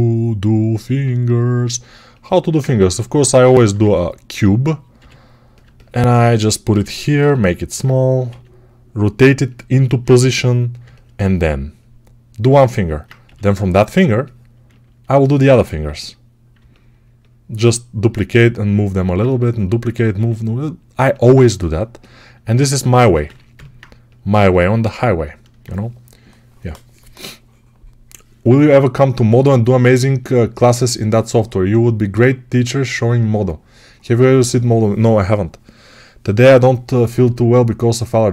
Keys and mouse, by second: 0.8-2.1 right drag, 0.8 g, 2.1-12.6 alt+shift+middle drag, 3.7 s, 4.8 g, 8.1 s, 10.0 g, 12.6-13.9 alt+right drag, 13.9-38.3 alt+middle drag, 15.7 s, 18.0 g, 20.0 s, 23.1 3.